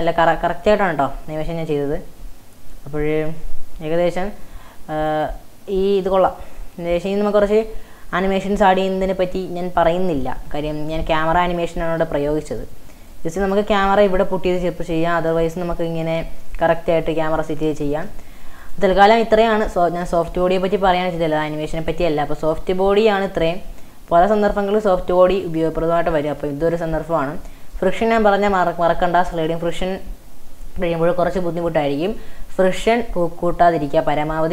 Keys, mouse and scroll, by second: 0.0-2.7 scroll up 1, 2.7-5.8 drag, 5.8 space, 6.1-10.1 middle drag, 12.7 space, 13.1-14.2 drag, 14.2 middle click, 14.2-14.6 scroll down 4, 14.6 middle click, 15.0 scroll up 4, 15.4-16.1 shift+middle drag, 16.1 scroll up 1, 16.5 middle click, 17.2 a, 17.9 shift+a, 18.6 click, 19.3-20.0 scroll down 1, 20.0 scroll down 1, 20.1-21.2 middle drag, 21.2 scroll up 3, 21.4-22.0 shift+middle drag, 22.0-22.6 scroll up 5, 22.6-23.8 middle drag, 23.8-24.5 scroll up 1, 24.5-25.6 scroll up 2, 25.6 scroll up 1, 25.6-26.7 middle drag, 26.7-27.8 scroll down 16, 27.8 middle click, 28.6 click, 29.0-29.5 scroll up 3, 29.6-32.0 shift+middle drag, 32.0 click, 32.9-34.2 middle drag, 34.2 scroll up 2.